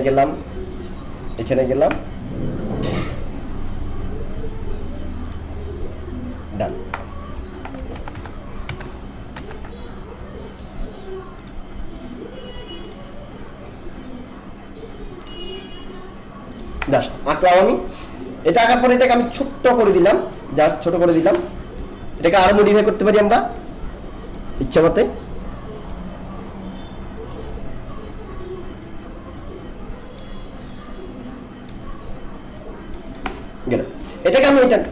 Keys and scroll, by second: 7.9 ctrl+z.